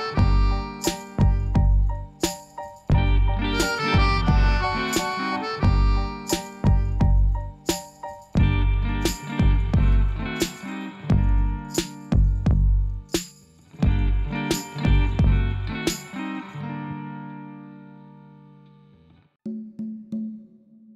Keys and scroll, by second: 15.5 alt+a, 18.1 Tab.